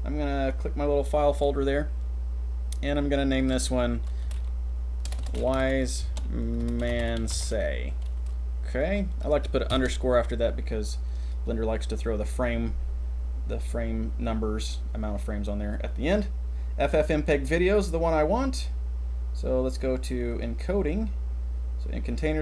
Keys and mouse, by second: 0.5 click, 20.3 click.